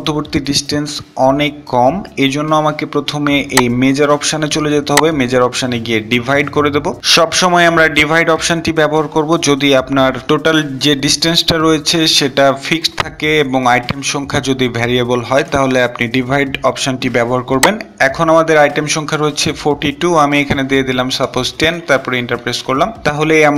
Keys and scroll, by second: 19.8 Return.